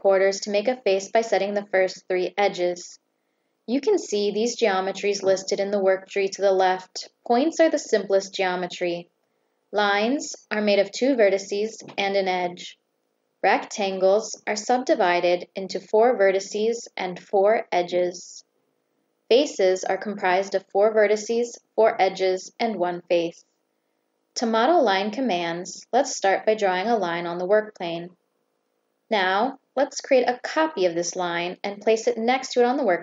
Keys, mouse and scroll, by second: 0.2 click, 1.1 click, 2.2 click, 5.9 click, 6.8 click, 7.7 click, 8.0 click, 8.7 click, 9.1 click, 9.5 click, 11.1 click, 11.5 click, 11.9 click, 13.0 click, 14.2 click, 14.6 click, 15.5 click, 16.2 click, 16.4 click, 17.7 click, 19.0 click, 19.8 click, 20.2 click, 20.6 click, 21.3 click, 22.0 click, 23.4 click, 24.7 click, 26.0 click, 27.2 click, 29.9 click, 30.7 click, 31.6 click.